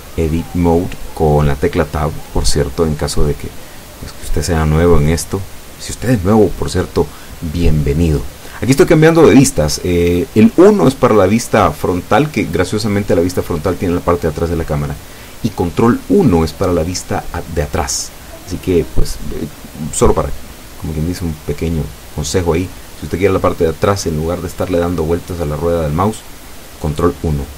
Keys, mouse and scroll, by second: 0.9-1.3 scroll up 1, 1.9 scroll down 1, 5.3 Tab, 13.6 KP_1, 16.1 ctrl+KP_1, 17.8-19.2 shift+drag, 19.6-20.2 shift+scroll up 5, 25.4 right click, 27.0 shift+right click.